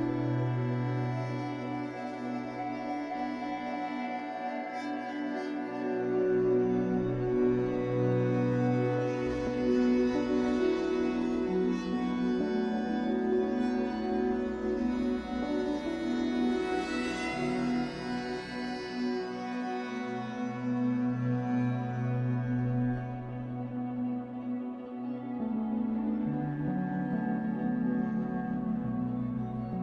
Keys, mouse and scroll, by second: 0.3 scroll down 2, 1.8 scroll up 2, 2.7-3.0 scroll up 2, 3.0 click, 3.6 middle click, 4.2 click, 4.9-6.1 shift+middle drag, 6.1-7.5 drag, 7.5 middle click, 8.1 click, 8.7 middle click, 9.1 click, 9.7 middle click, 10.2-13.0 drag, 12.8 scroll down 1, 13.0-15.1 middle drag, 13.8 scroll up 2, 15.1-17.3 drag, 17.3 shift+middle click, 17.8-20.1 drag, 20.1 middle click, 20.5-23.5 drag, 23.4 scroll down 2, 23.5-24.9 middle drag, 24.5-24.9 scroll up 2, 24.9-27.0 drag, 27.0 middle click, 27.5-29.8 drag.